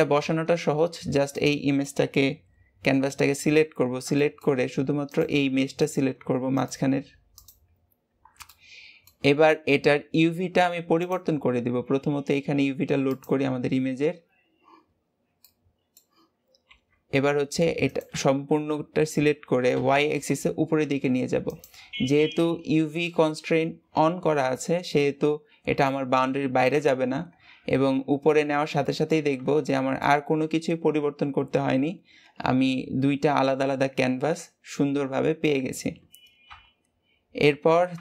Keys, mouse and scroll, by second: 0.4-0.9 scroll up 2, 0.9-1.2 scroll down 2, 1.2-2.5 shift+middle drag, 2.5-3.2 scroll up 1, 3.2 Tab, 3.5-3.9 scroll up 2, 4.1 shift+middle click, 5.0 click, 5.7 click, 6.4 click, 7.2 click, 8.0 scroll up 2, 8.4-9.4 middle drag, 9.4-10.0 scroll down 1, 10.0-10.8 scroll up 1, 10.8 scroll up 1, 10.9-13.5 drag, 13.5-14.4 scroll down 3, 14.4-14.8 scroll up 1, 14.8-15.3 scroll down 5, 15.3-16.5 middle drag, 16.5 g, 27.2-28.7 scroll up 1, 28.7 shift+middle click, 29.4 Tab, 30.0-33.0 middle drag, 36.4 KP_1.